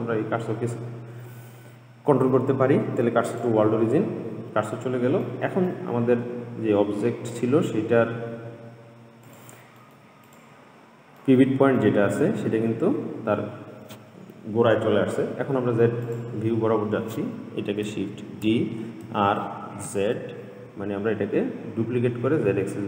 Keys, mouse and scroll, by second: 5.5-8.5 middle drag, 9.5 click, 10.1-10.5 middle drag, 10.5 click, 11.4-14.5 middle drag, 16.3 click, 18.4 shift+d.